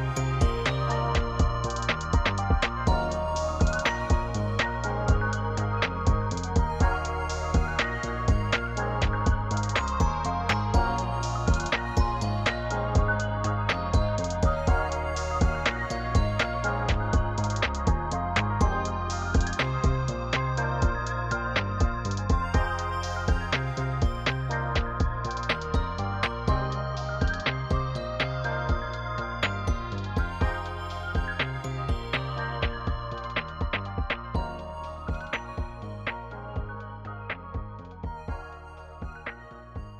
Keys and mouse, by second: 1.1 click, 2.0 shift+click, 3.4-3.9 drag, 7.0 Tab, 8.2 click, 8.7 middle click, 13.3 click, 14.6 ctrl+r, 17.1 click, 20.7 Tab, 22.5 click, 24.5 click, 24.9-26.6 middle drag, 27.7 click, 34.1-35.3 drag, 35.9-39.6 drag.